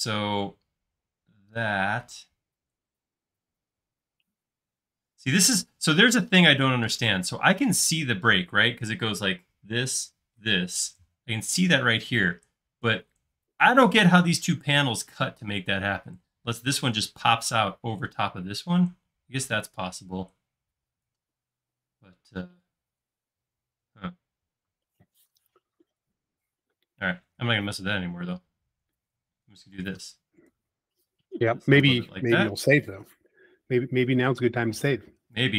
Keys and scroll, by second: 5.8 space, 28.2 super+z, 28.7 super+z, 29.7 p, 32.3 space, 35.0 m.